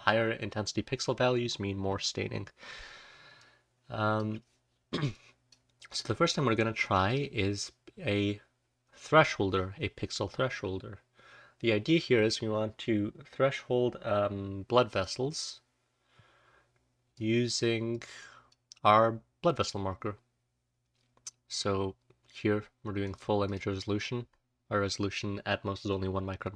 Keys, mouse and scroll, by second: 1.2-1.8 scroll up 1, 1.8-2.7 scroll up 1, 2.7-6.8 scroll down 1, 3.6-4.3 drag, 5.1-5.4 drag, 6.8 click, 6.8-7.9 scroll down 1, 7.9-10.5 scroll down 1, 10.5-14.5 scroll down 1, 14.5-15.1 scroll down 1, 15.1-15.7 scroll down 1.